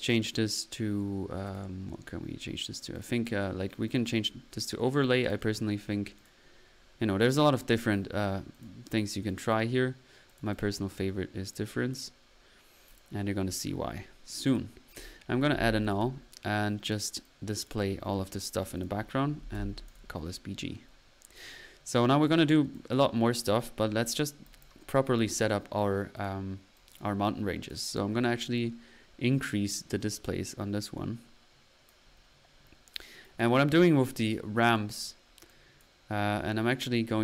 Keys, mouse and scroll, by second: 2.9-3.5 drag, 3.9 click, 4.2 middle click, 5.0 click, 6.2 click, 7.2 drag, 8.5 drag, 9.3 click, 10.3-10.8 drag, 11.4-12.2 typing, 11.5 click, 12.9 click, 13.6 middle click, 14.1-14.9 typing, 14.4-15.1 drag, 15.5 alt+n, 15.8 alt+click, 16.8-17.9 alt+drag, 17.9 middle click, 18.6 click, 20.7-21.3 middle drag, 21.3 click, 22.0 click, 23.0 click, 24.4 click, 24.8 click, 26.1-26.4 drag, 26.7 click, 26.8 typing, 27.6 click, 28.6-30.5 drag, 31.9 click, 32.5-33.0 middle drag, 33.2 click, 34.2 drag, 34.6 click, 35.3 typing, 35.5 click, 36.2-36.7 middle drag, 36.5 typing, 36.7 right click, 36.7-37.2 drag.